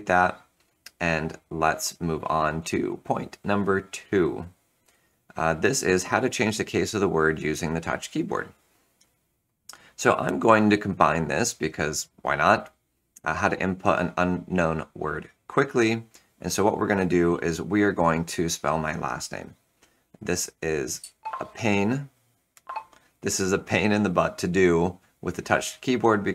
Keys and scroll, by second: 20.9 super+h.